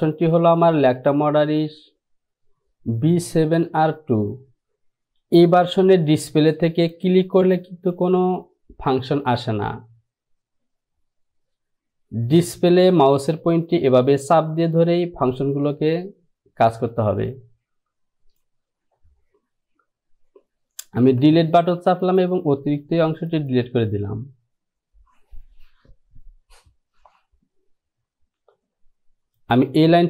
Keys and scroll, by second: 21.1 Delete.